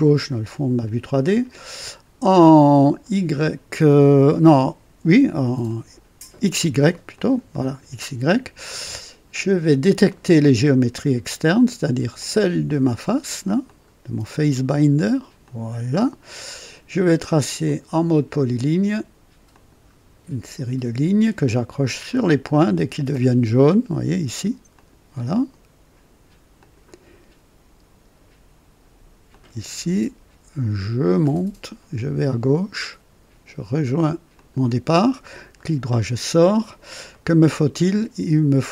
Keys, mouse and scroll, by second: 1.2 click, 7.1 click, 7.9 scroll up 1, 8.6 scroll down 1, 10.0 click, 12.1 click, 13.6 click, 15.3 click, 17.6 click, 19.4 click, 22.0 click, 24.6 click, 26.5 click, 29.2 click, 31.1 click, 34.3 click, 35.5 right click, 37.0 right click.